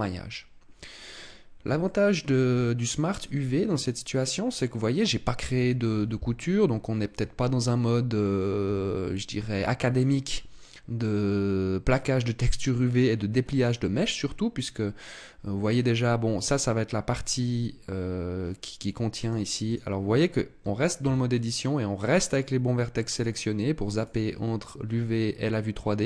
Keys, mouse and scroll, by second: 19.6 click, 20.4 Tab, 20.8 Tab, 23.0 click.